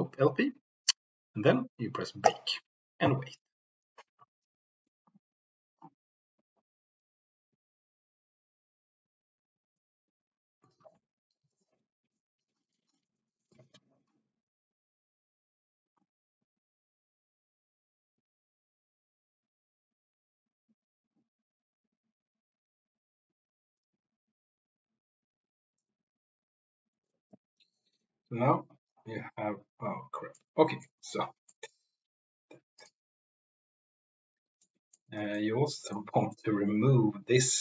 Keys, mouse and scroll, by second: 2.2-26.8 drag, 30.3 middle click, 31.4 middle click, 34.7 middle click, 35.2 middle click, 35.7 middle click.